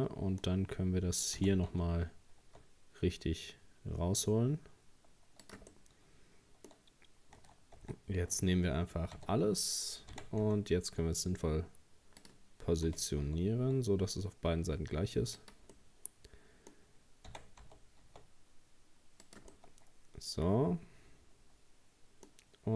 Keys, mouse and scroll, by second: 1.4 r, 5.7-7.8 middle drag, 7.8 Tab, 9.2 a, 10.1 r, 12.9 g, 15.7-17.3 middle drag, 17.3 r, 19.5-22.6 middle drag.